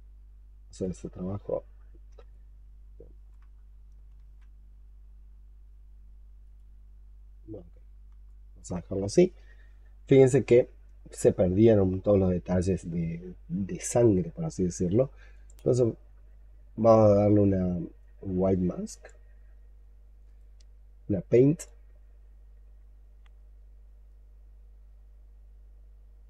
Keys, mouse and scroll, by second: 1.6-2.1 scroll down 10, 2.2 alt+click, 3.4-3.9 alt+scroll up 6, 4.0 ctrl+z, 7.5-8.1 scroll down 10, 8.1 alt+click, 8.8-9.4 alt+scroll up 5, 9.5-9.9 scroll up 5, 10.1 alt+click, 10.8-14.1 scroll up 7, 15.5 right click, 20.1 right click, 24.0 ctrl+right click.